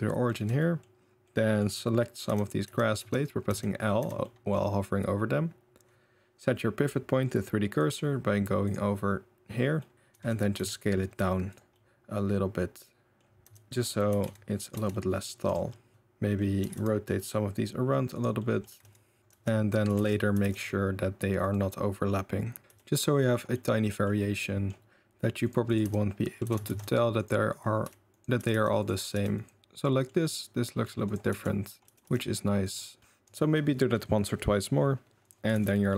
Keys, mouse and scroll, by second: 0.4 Tab, 0.6 middle click, 1.3 middle click, 2.3 l, 2.7 l, 3.0 l, 3.5 click, 4.0 click, 4.2 middle click, 8.8-9.6 drag, 9.8 middle click, 10.1 s, 11.8-13.3 middle drag, 13.4 l, 13.5 l, 14.1 s, 14.8 Tab, 15.0 middle drag, 15.4 middle click, 15.5 click, 15.5 middle drag, 15.9 Tab, 15.9 middle click, 16.6 r, 18.4 click, 18.7 r, 19.2 click, 19.2 l, 19.2 z, 20.0 ctrl+z, 20.4 r, 22.6 r, 23.5 middle click, 24.4 middle click, 25.8 click, 25.9 l, 26.5 g, 27.9 r, 28.4 r, 29.0 r, 29.4 middle click, 29.6 ctrl+s, 29.6-30.1 middle drag, 30.2-30.8 middle drag, 31.3 Tab, 31.8 l, 31.9 r, 32.9-33.3 middle drag, 35.6 ctrl+s, 35.8 middle drag.